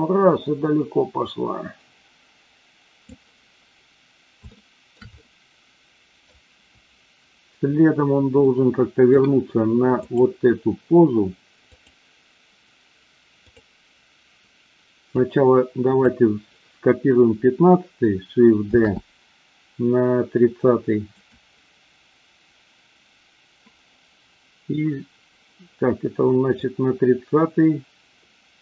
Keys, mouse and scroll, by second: 4.5-5.0 shift+middle drag, 5.1-6.3 middle drag, 8.4 middle click, 10.0 click, 11.7 click, 13.4 click, 15.1-16.0 drag, 18.8 shift+d, 21.1 click, 26.6-28.6 drag.